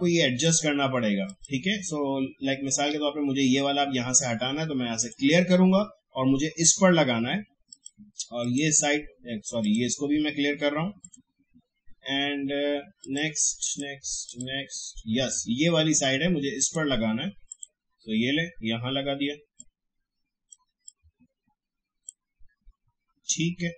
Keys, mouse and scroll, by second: 5.0 click, 7.7 click, 16.6 click, 20.8-23.7 drag.